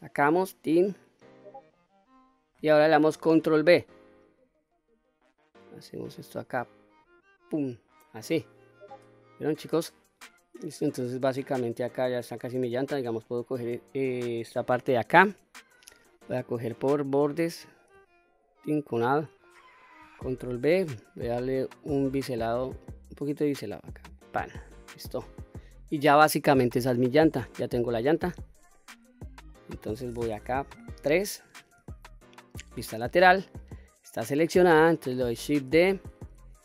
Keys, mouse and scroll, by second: 0.1 click, 0.6 middle click, 2.0-2.7 scroll up 1, 3.3 ctrl+b, 6.9 click, 10.1 middle click, 11.2-11.8 scroll up 1, 11.8 middle click, 13.3 click, 15.9 2, 17.0 click, 18.3 alt+click, 19.5 middle click, 20.5 ctrl+b, 24.2 click, 24.7-25.1 scroll down 2, 25.1 middle click, 25.9-26.5 scroll down 1, 26.5 scroll down 1, 26.9 middle click, 28.3 Tab, 28.8-29.5 middle drag, 30.7 KP_3, 32.1-32.8 shift+middle drag, 35.7 shift+d.